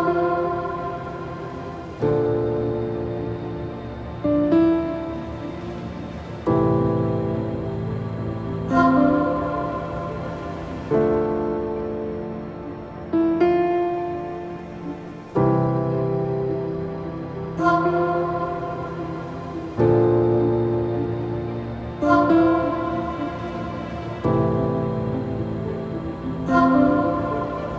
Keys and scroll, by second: 12.7 ctrl+z.